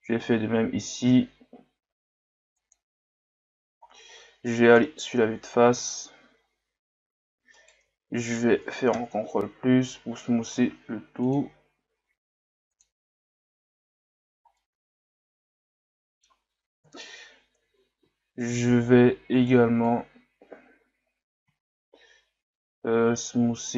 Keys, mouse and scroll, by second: 3.9 scroll down 1, 4.8 KP_1, 7.5 alt+right click, 8.9 ctrl+KP_Add, 10.5 w, 12.2 w, 14.6-16.8 middle drag, 16.8 KP_1, 18.1-18.8 scroll up 2, 19.3 right click.